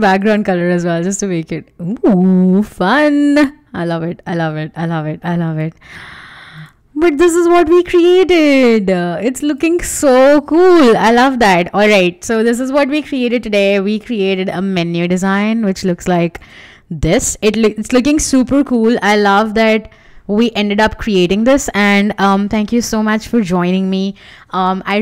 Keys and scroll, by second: 16.6 shift+f.